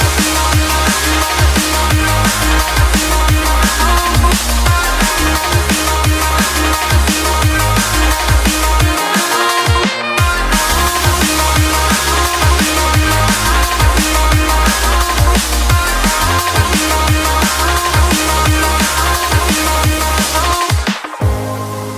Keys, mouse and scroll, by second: 4.4-5.3 typing, 6.0 click, 9.2-10.7 typing, 11.8 click, 12.4-13.7 typing, 14.6 click, 15.2-16.8 typing, 17.6-18.7 drag, 21.0-21.9 typing.